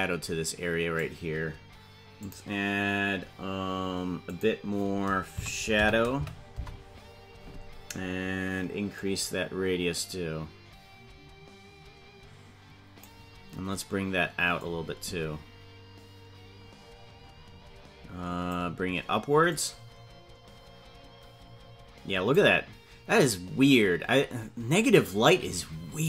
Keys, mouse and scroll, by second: 2.5-7.8 drag, 8.9-13.3 drag, 14.8-18.9 drag, 19.9-22.8 drag.